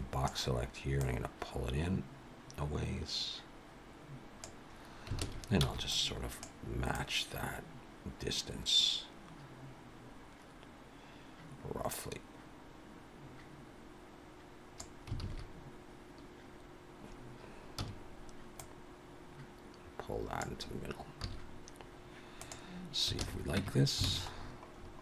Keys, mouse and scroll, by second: 1.0 click, 5.2 alt+a, 5.6 b, 7.0 click, 15.2 alt+a, 17.7 a, 18.6 click, 21.2 z, 23.2 alt+a, 23.6 Tab, 24.1 alt+a, 24.4-25.0 scroll down 7.